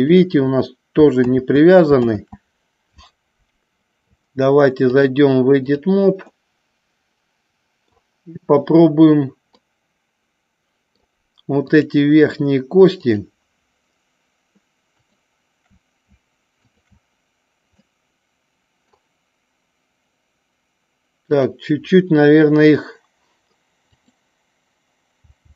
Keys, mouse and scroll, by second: 0.1 click, 1.6 ctrl+z, 2.3 ctrl+z, 4.9-6.0 drag, 6.5-8.1 middle drag, 9.6-11.1 middle drag, 11.7 click, 13.1 shift+click, 15.1 shift+click, 16.7 shift+click, 18.0 middle click, 21.3 click, 24.1 click.